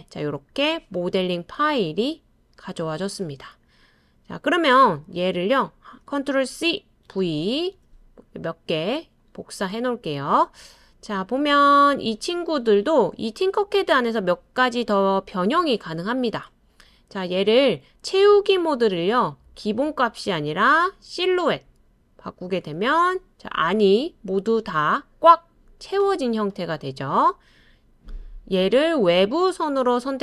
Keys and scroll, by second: 6.5 super+c, 7.1 super+v, 7.7 super+v.